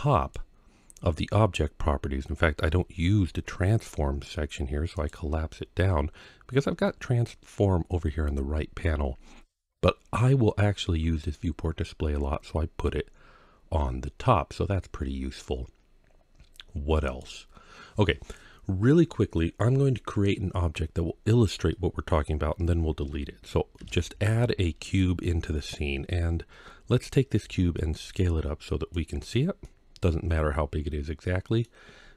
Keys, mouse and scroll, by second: 2.8-4.8 scroll down 3, 4.8 click, 5.3-6.0 scroll up 2, 6.0 scroll up 1, 16.9 click, 22.1-22.9 scroll up 1, 23.6 shift+a, 27.2 s, 28.8 click, 29.4-31.4 middle drag.